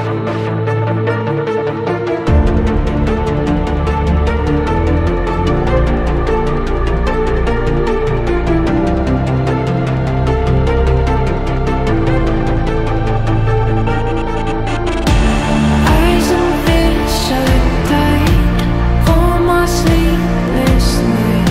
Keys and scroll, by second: 15.8 c.